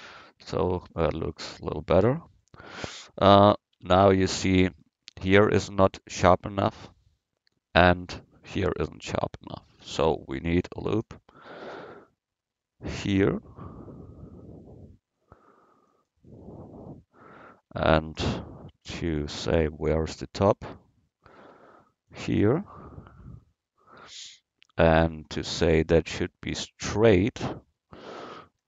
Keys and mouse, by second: 2.3 KP_1, 3.8 Tab, 10.8 ctrl+r, 19.2 ctrl+r, 28.4 ctrl+r.